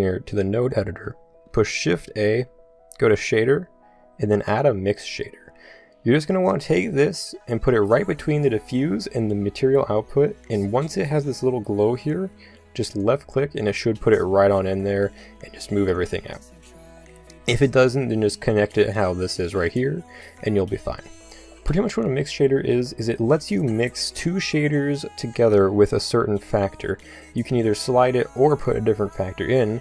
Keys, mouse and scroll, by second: 0.3-1.9 drag, 1.9 shift+a, 13.0-14.8 drag, 27.2-29.8 drag.